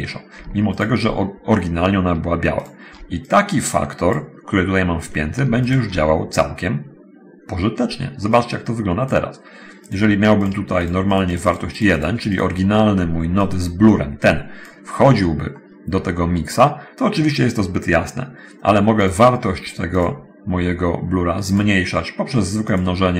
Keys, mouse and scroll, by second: 1.0 ctrl+shift+click, 2.9 ctrl+shift+click, 3.3 click, 5.9 ctrl+shift+click, 8.6-9.3 drag, 10.1 click, 10.7 click, 11.2 click, 12.3 click, 13.7-15.1 drag, 15.2 scroll up 1, 15.4 middle click, 19.3 click, 19.8 click, 21.2 click.